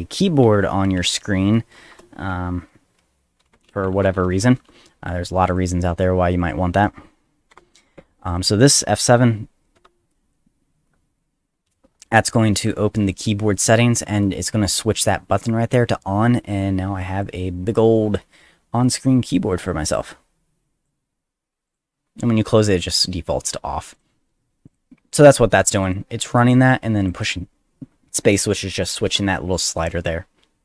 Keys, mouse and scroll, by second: 0.2-1.6 typing, 3.2-5.0 typing, 5.5 click, 6.4 click, 7.5 ;, 8.3 click, 9.7 F7, 23.9 click, 24.7 click, 25.9 click, 27.0 click, 27.1 click.